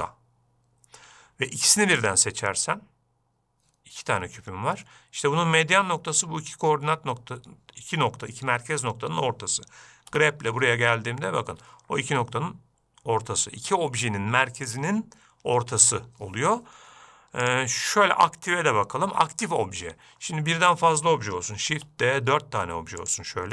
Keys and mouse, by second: 2.0 shift+click, 10.5 g, 18.0-19.4 drag, 22.1 shift+d.